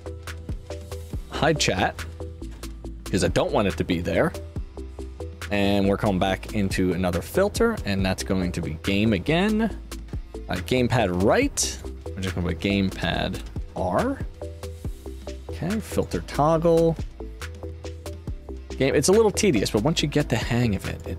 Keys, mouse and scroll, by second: 1.5 click, 5.6 click, 7.7 click, 10.9 click, 11.6 click, 12.3 shift+t, 13.3 space, 13.5 shift+t, 15.6 click, 17.4 click, 20.3 click, 20.8 click.